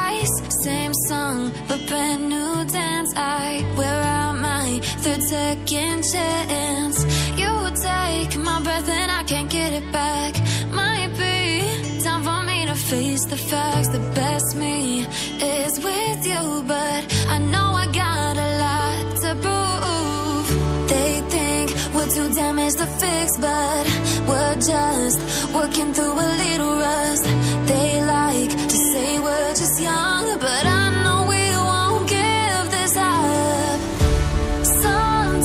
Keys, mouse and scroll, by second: 5.4 click, 10.5 ctrl+z, 10.8 ctrl+z, 11.7 click, 19.0 click, 27.2 click, 31.2 click.